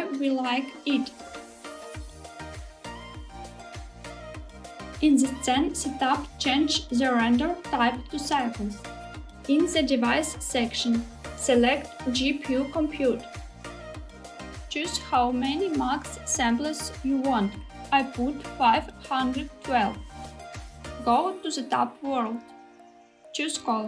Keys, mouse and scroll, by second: 2.7 click, 6.2-7.5 drag, 8.6-10.1 drag, 14.8-19.0 drag, 21.5 click.